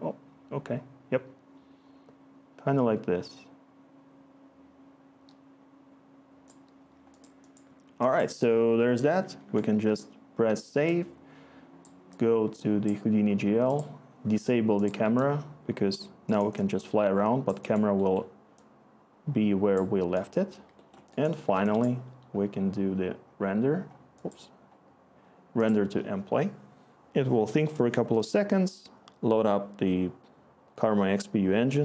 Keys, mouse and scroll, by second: 9.4 ctrl+s.